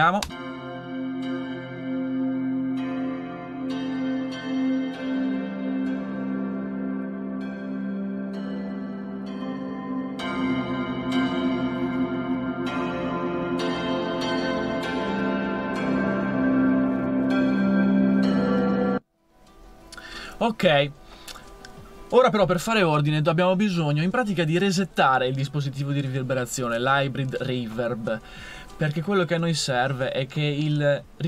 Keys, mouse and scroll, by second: 0.2 space, 18.6 space.